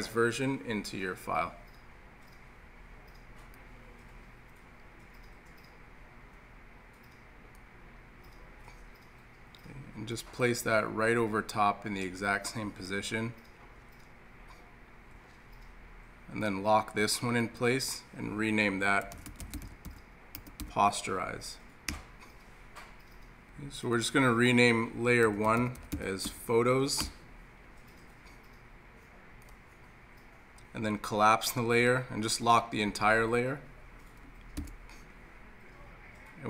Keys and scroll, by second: 34.6 super+l.